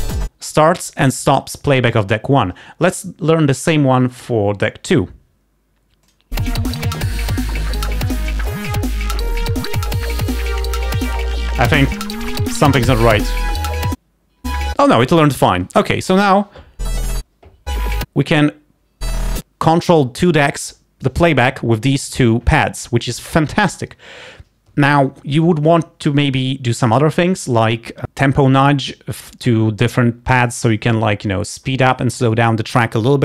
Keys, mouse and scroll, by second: 6.1 click.